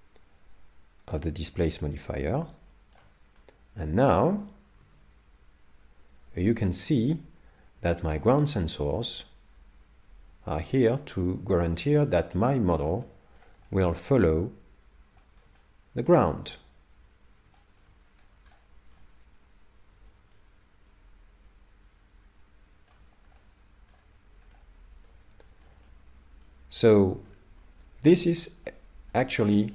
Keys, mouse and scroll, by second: 3.4 middle click, 4.8 alt+a, 6.4 middle click, 9.4 middle click, 12.5 shift+middle click, 13.0 middle click, 13.7 shift+middle click, 15.2 shift+middle click, 15.6 middle click, 17.6 shift+middle click, 18.0-18.4 scroll down 4, 18.2 scroll up 1, 18.5 shift+middle click, 20.4 shift+click, 23.4 middle click, 24.6 middle click, 25.4 shift+middle click, 25.8 middle click, 27.3 shift+middle click, 28.3 middle click, 28.7 middle click, 29.4 shift+middle click.